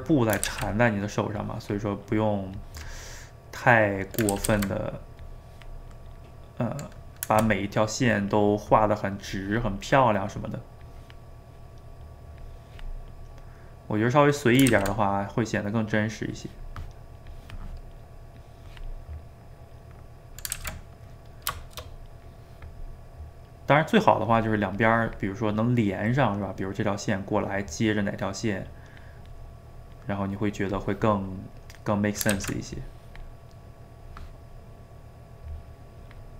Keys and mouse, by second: 0.5 ctrl+z, 0.6 middle click, 1.4-3.2 drag, 3.2-4.3 middle drag, 4.3 ctrl+z, 4.5 ctrl+z, 5.2 click, 6.0-8.0 middle drag, 8.0 click, 8.5 middle click, 9.3 click, 10.0 middle click, 10.8 click, 11.5 middle click, 12.4 click, 13.3-14.7 middle drag, 14.7 ctrl+z, 15.2-16.3 middle drag, 16.3-19.7 drag, 19.7 middle click, 20.5 ctrl+z, 20.8-22.3 middle drag, 22.3 click, 23.0-24.8 middle drag, 24.8 click, 25.7-28.0 middle drag, 28.0-29.4 drag, 29.4-30.8 middle drag, 30.8 click, 31.7 middle click, 32.3 ctrl+z, 32.8 click, 33.5-35.5 middle drag, 35.5-36.3 drag.